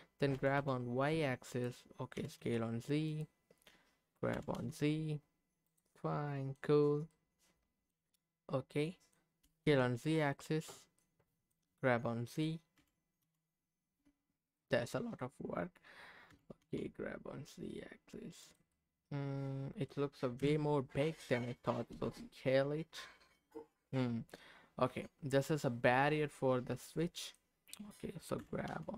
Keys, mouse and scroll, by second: 0.3 g, 0.5 y, 1.5 click, 2.2 s, 2.4 z, 3.0 click, 4.3 g, 4.5 z, 5.6 click, 6.0 middle click, 7.1 middle click, 8.8 middle click, 9.5 s, 9.6 z, 10.3 click, 10.7 scroll up 2, 11.0 middle click, 12.8 g, 13.2 z, 14.5 click, 14.8 middle click, 16.3 g, 16.6 z, 18.4 click, 18.7-20.0 middle drag, 20.4 KP_7, 21.9 s, 23.5 click, 23.8-27.5 middle drag, 28.4 g, 28.7 z.